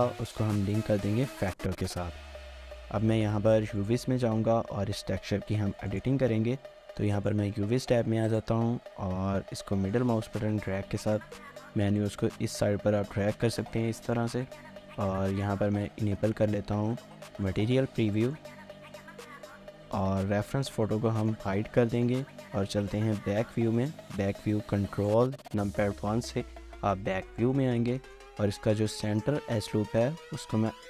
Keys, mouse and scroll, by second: 2.7 scroll down 1, 3.0 middle click, 8.9 middle click, 17.2 scroll up 1, 17.5 shift+middle click, 18.6 middle click, 22.4 middle click, 26.0 ctrl+1, 26.9 scroll up 1, 27.4 shift+middle click, 27.7 scroll up 1, 28.0 shift+middle click, 28.3 scroll up 1.